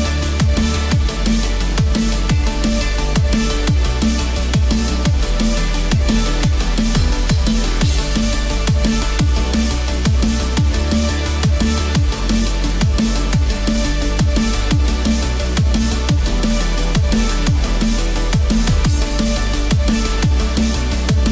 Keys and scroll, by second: 18.3 ctrl+-.